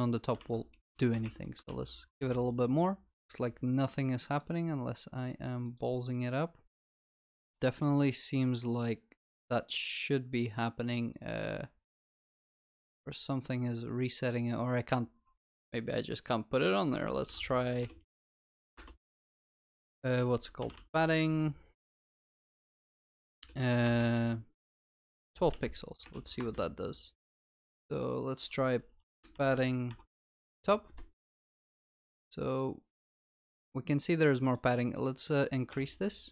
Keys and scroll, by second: 1.7 ctrl+s.